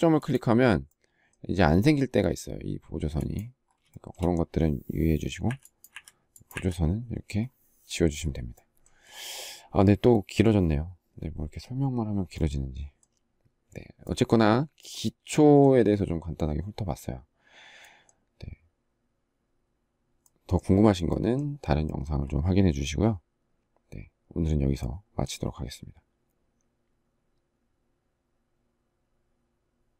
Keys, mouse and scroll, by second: 2.3 space, 3.2 shift+middle click, 4.8 Delete.